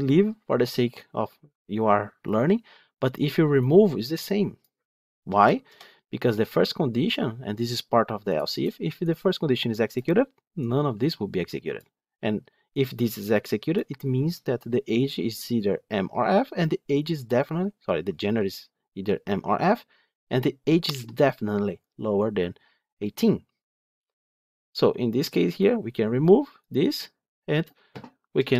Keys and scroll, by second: 28.3 F12.